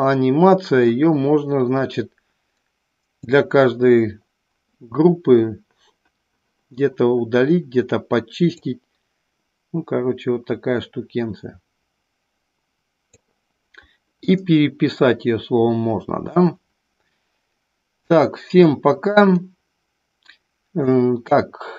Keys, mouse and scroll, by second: 2.3-3.6 drag, 9.2-14.1 drag, 15.1-16.1 middle drag, 16.2-17.0 middle drag, 18.6-21.7 drag.